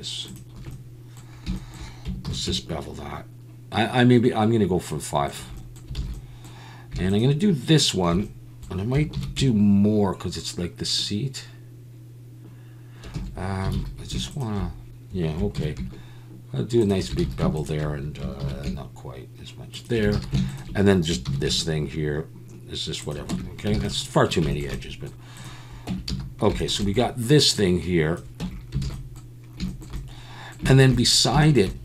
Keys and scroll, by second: 2.3 ctrl+b, 6.0 alt+a, 9.1 ctrl+b, 13.1 Escape, 13.7 alt+a, 15.6 ctrl+b, 17.2 alt+a, 18.4 ctrl+b, 20.1 alt+a, 21.3 ctrl+b, 21.4 ctrl+b, 23.3 Tab, 23.8 alt+a, 25.9 Tab, 26.1 a, 28.4 Tab, 28.8 alt+a.